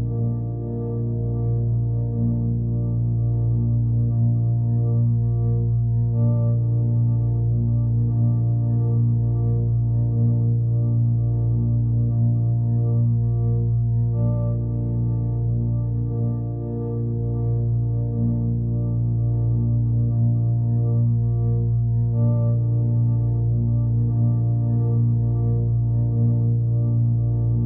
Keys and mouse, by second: 1.8-3.0 drag, 3.6 click, 3.9 click, 5.7 click, 7.4 click, 9.5 click, 10.4-11.4 middle drag, 11.2 click, 12.5 s, 13.2 click, 14.5 click, 16.4 click, 17.4 alt+shift+click, 19.7 shift+click, 20.6 alt+shift+click, 21.5 click, 21.7 click, 22.4 click, 22.9 right click, 23.7 click, 24.7-25.6 right drag, 25.6 click.